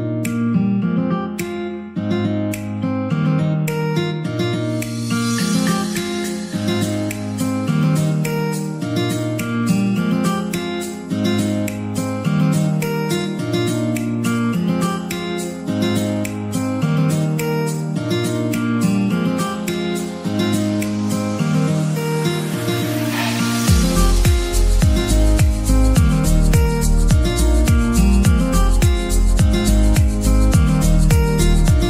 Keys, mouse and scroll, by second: 0.8 ctrl+r, 1.2-1.6 scroll up 1, 1.6 click, 1.8 s, 4.6 click, 4.9 Tab, 5.0 scroll down 2, 5.3-8.3 middle drag, 8.7 shift+d, 9.1 y, 9.7 click, 10.3 s, 11.2 click, 11.7 s, 13.3 middle click, 13.9 s, 15.1 middle click, 15.8-16.2 scroll up 3, 16.3 shift+middle click, 17.0 s, 17.3 y, 18.3 click, 19.2 g, 21.6 click, 22.0 scroll down 1, 22.1 middle click, 22.8 s, 24.8 click, 25.1-25.4 scroll down 4, 25.4 middle click, 25.9-26.4 scroll down 4, 26.4 middle click, 27.1 scroll up 1, 27.4 shift+middle click, 28.1-29.4 scroll up 1, 29.4-31.8 middle drag.